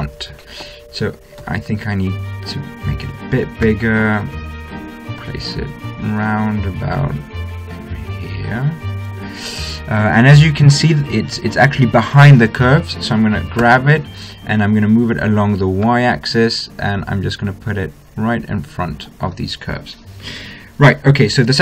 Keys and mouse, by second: 1.9 s, 4.0 g, 14.0 g.